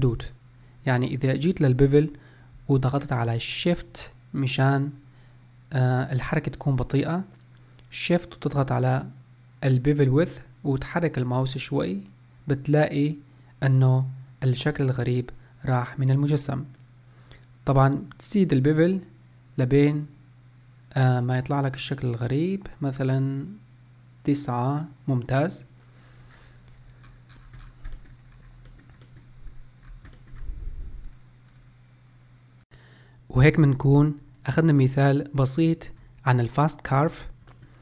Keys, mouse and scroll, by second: 8.3-11.5 shift+drag, 27.1 scroll up 4, 27.3-28.0 scroll down 12, 28.0-28.3 shift+middle drag, 28.3-28.7 scroll up 1, 28.7-29.8 middle drag, 29.8 scroll down 2, 30.1-34.5 shift+middle drag, 35.6-37.1 middle drag, 37.1-37.5 scroll down 1, 37.5-37.8 shift+middle drag.